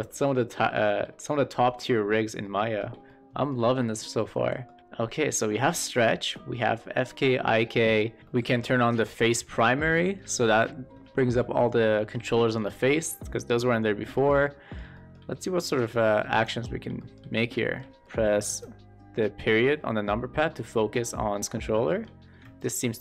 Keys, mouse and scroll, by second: 2.3-2.6 shift+middle drag, 2.9-3.4 middle drag, 3.7 shift+middle click, 4.3 middle click, 8.2 shift+middle click, 8.9 click, 9.4 middle click, 9.9 shift+middle drag, 10.5 middle click, 11.1 shift+middle click, 11.4 middle click, 11.8 shift+middle click, 12.6 shift+middle click, 14.0 shift+middle click, 14.3 middle click, 14.8 shift+middle click, 16.2 click, 16.9 shift+middle drag, 17.5 shift+middle click, 17.9 middle click, 18.4 KP_Decimal, 20.3-21.4 middle drag, 21.8 shift+middle click.